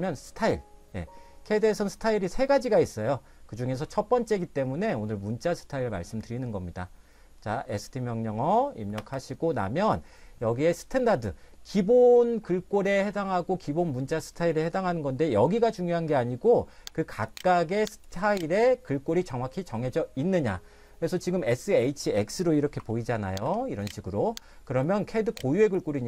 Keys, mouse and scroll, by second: 9.0 space, 17.3 click, 24.0 click, 25.0 click.